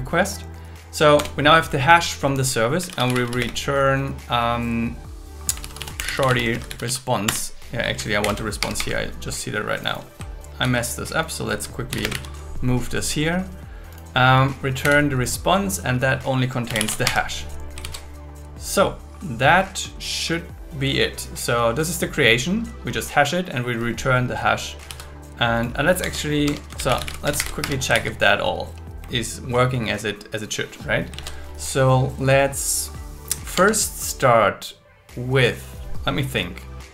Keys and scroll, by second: 1.2 Return, 3.4 space, 5.4-7.0 typing, 7.2 Return, 8.2 shift+8, 8.6 Escape, 10.6 super+c, 11.9 shift+., 12.0 space, 12.1 super+v, 14.8 Left, 15.5 Left, 17.0 Escape, 18.5 super+s, 24.9 super+s, 26.4 Tab, 26.5-27.7 typing, 28.9 super+s, 31.9 super+1, 33.6 ctrl+Tab.